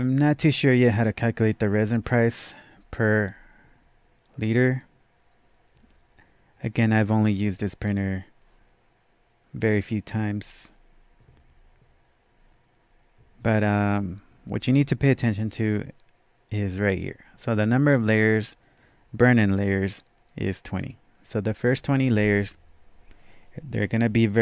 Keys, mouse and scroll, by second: 13.8 click, 13.8 scroll up 1, 13.9-15.7 scroll down 1, 19.6-23.4 drag.